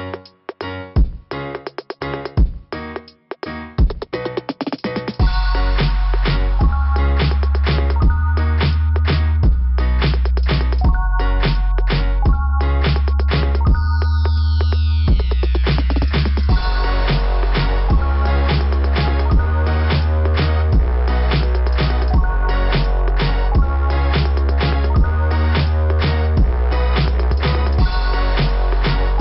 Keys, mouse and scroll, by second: 0.9 click, 1.2 click, 2.4 click, 4.0 right click, 5.5 click, 8.6 click, 8.9 click, 9.1 click, 10.2 click, 12.2 click, 13.0 right click, 13.2 right click, 15.6 click, 17.0 scroll down 2, 19.6 click, 21.1 click, 24.8 scroll down 2.